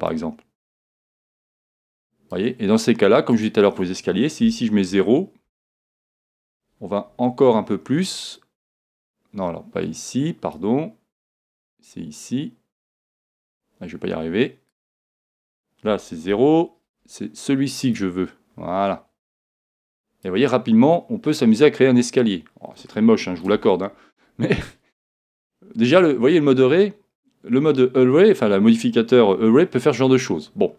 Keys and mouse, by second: 3.3 click, 8.4 click, 11.6 click, 14.9 click, 17.9 click, 20.8-22.7 middle drag, 23.5 z, 24.1-28.3 middle drag, 29.6-30.7 middle drag.